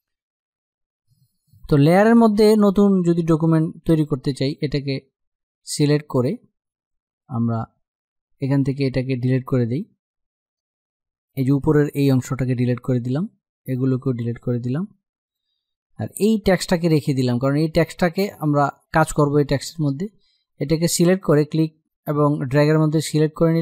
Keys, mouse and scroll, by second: 2.7-11.8 drag, 11.8 Delete, 12.7-14.0 drag, 14.0 Delete, 14.5 click, 15.2 Delete, 15.8-23.4 drag.